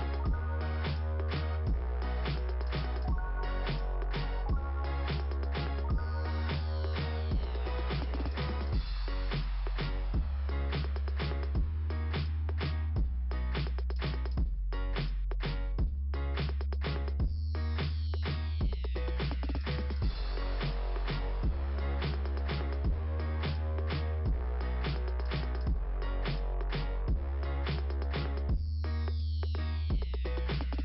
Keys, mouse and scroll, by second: 5.6 click, 9.5 scroll down 2, 11.0 click, 11.8 click, 11.9 click, 13.1 click, 15.9 click, 18.1 click, 18.2 click, 19.9 click, 20.8 click, 22.7 click, 22.8 click, 23.8 click, 23.9 click, 24.4 click, 24.6 click, 25.7 click, 25.9 click, 29.3 click.